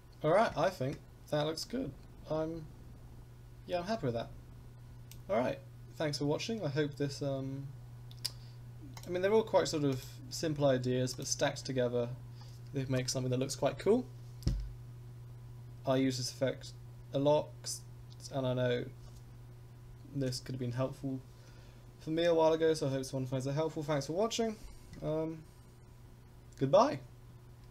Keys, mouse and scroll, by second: 1.6-5.1 drag, 6.3-7.2 scroll up 1, 7.2-8.9 scroll down 1, 8.9 click, 9.9 click, 11.1 click.